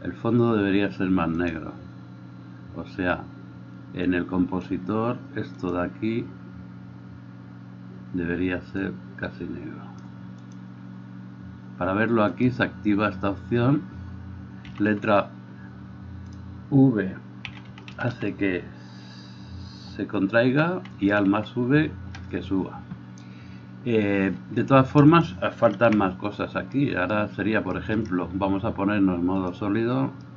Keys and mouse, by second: 0.0-1.5 middle drag, 1.5-7.6 drag, 7.6-10.5 middle drag, 10.5 click, 10.7-12.4 middle drag, 12.4-16.5 drag, 16.5-30.3 middle drag, 16.5 v, 17.8 v, 18.1 v, 19.4 alt+v, 20.3 v, 21.2 alt+v, 22.3 alt+v, 24.7 Escape, 26.0 KP_1.